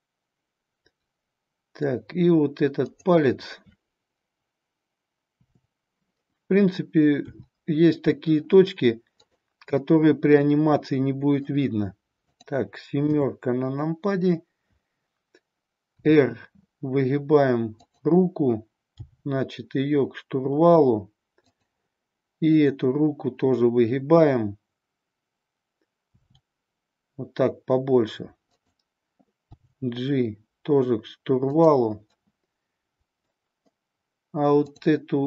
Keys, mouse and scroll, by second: 5.4 KP_7, 7.2 r, 9.2 click, 9.8-11.4 middle drag, 12.2 click, 14.3 KP_7, 16.0 r, 17.8 click, 18.9 g, 21.5 click, 22.4-25.1 drag, 26.2 r, 28.6 click, 29.4 g, 32.2-33.4 middle drag.